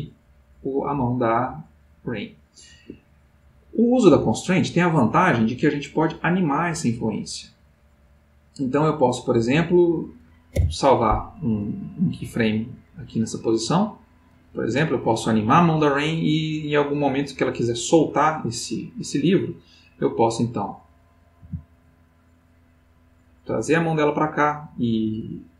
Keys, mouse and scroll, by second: 3.0 Escape, 3.9 click, 10.5 i, 14.5 Escape, 19.0-19.8 middle drag, 20.5 click, 21.4 g, 23.8 click.